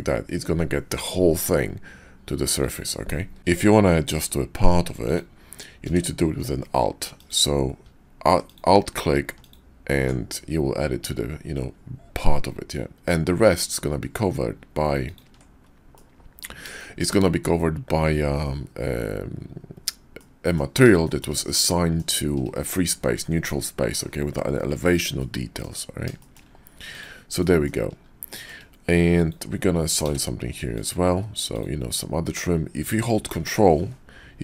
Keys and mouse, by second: 3.4 ctrl+z, 5.8 d, 15.9 click, 16.8 shift+click, 20.2 middle click, 21.0 shift+middle click, 21.5 middle click, 25.2 middle click, 26.2 shift+click, 27.3 click, 28.3 shift+click, 30.0 d.